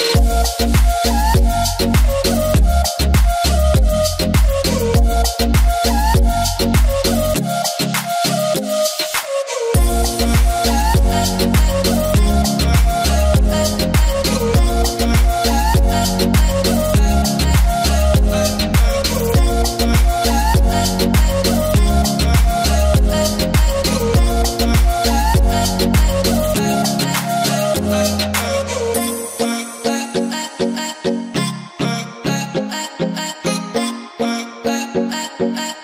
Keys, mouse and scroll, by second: 5.6-24.8 drag, 29.6-34.2 alt+drag, 34.2 Up.